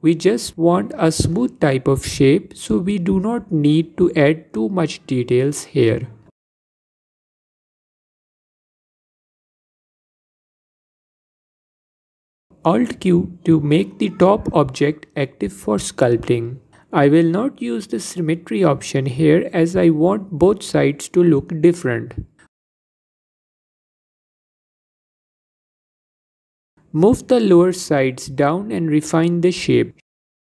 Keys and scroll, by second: 4.7 ctrl+z, 12.9 alt+q, 13.9 f, 16.6 f, 22.3 f, 25.8 f.